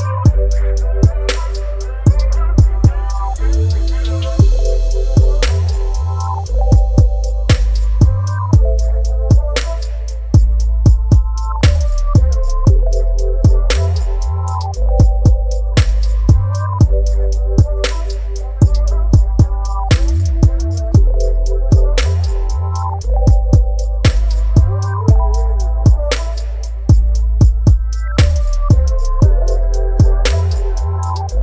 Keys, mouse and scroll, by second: 4.6 click, 10.1-10.7 scroll down 1, 19.1-21.0 scroll down 1, 26.7-27.0 scroll up 1, 27.6 click, 30.5 click.